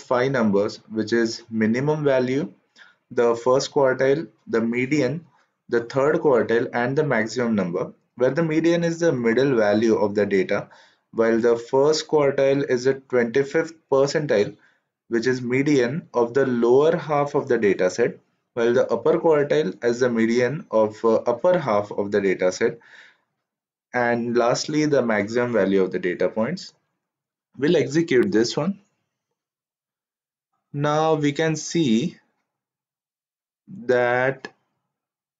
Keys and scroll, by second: 28.3 shift+Return.